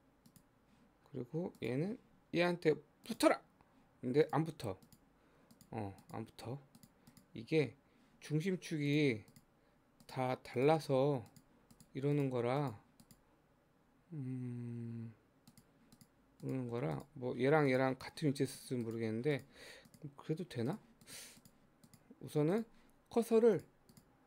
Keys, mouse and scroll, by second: 0.2-1.6 drag, 4.3 click, 4.9 click, 5.6 click, 6.0 click, 6.8 click, 7.1 click, 9.3 click, 10.0 click, 10.6 click, 11.3 click, 11.8 click, 12.2 click, 12.6 click, 13.0 click, 15.5 click, 16.0 click, 16.5 click, 17.0 click, 17.7 click, 18.5 click, 18.9 click, 19.4 click, 19.9 click, 20.7 click, 21.1 click, 21.4 click, 21.9 click, 22.6 click, 23.6 click, 23.9 click.